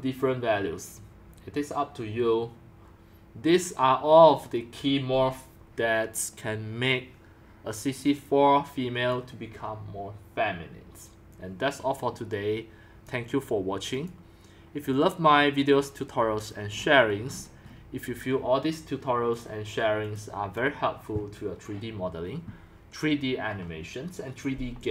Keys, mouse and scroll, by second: 0.6 click, 6.4-7.8 drag, 9.1-11.5 drag, 16.8-17.3 scroll down 5, 17.3-19.4 middle drag, 17.3-18.2 scroll, 19.4-24.9 drag.